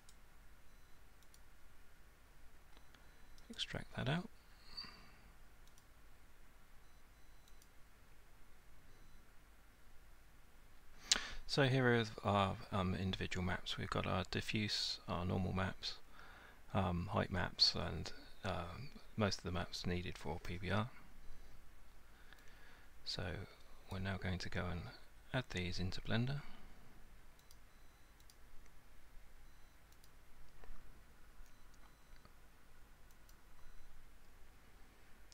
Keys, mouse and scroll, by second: 0.1 right click, 1.4 click, 3.6 right click, 5.8 click, 7.7 click, 23.9 click, 27.5 click, 28.3 click, 30.1 click, 33.3 click.